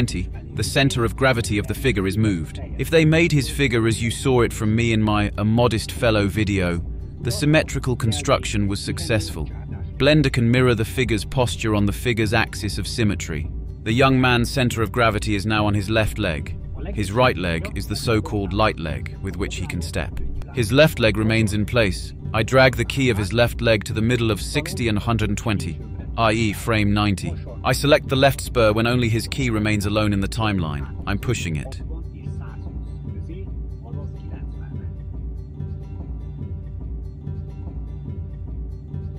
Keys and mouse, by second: 0.7-1.9 drag, 3.1-5.6 drag, 6.3-10.2 drag, 6.3-10.2 middle drag, 6.3-10.2 right drag, 11.3-27.4 drag, 28.8 click, 30.1 click, 32.1-38.7 drag.